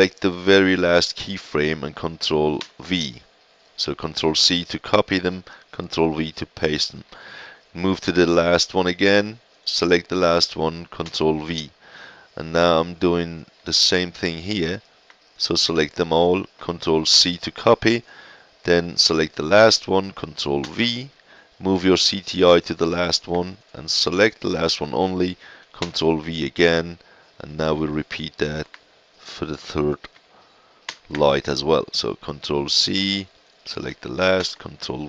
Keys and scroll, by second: 2.5 ctrl+v, 11.0 ctrl+v, 17.1 ctrl+c, 20.6 ctrl+v, 25.8 ctrl+v, 30.8 ctrl+c, 34.3 ctrl+v.